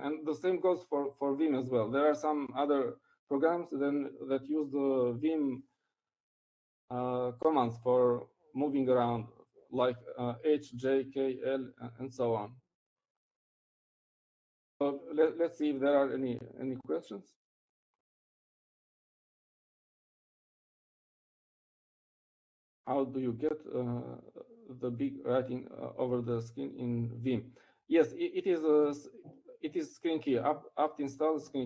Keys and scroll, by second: 18.3 ctrl+alt+c.